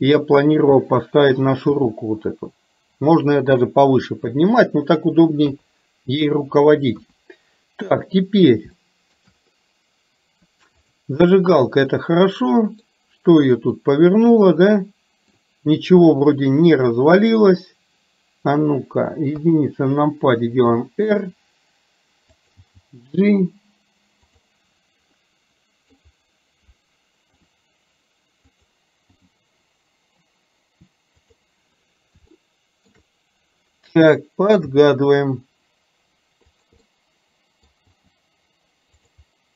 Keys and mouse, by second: 1.8 g, 5.5 KP_3, 7.0 KP_1, 9.0 shift+middle click, 11.0 click, 12.1 middle click, 13.8-15.5 middle drag, 19.3 KP_1, 20.7 r, 22.6 g, 25.2 middle click, 27.3 r, 29.2 g, 32.3 shift+middle click, 34.8 g, 36.8-37.8 middle drag, 38.1 g.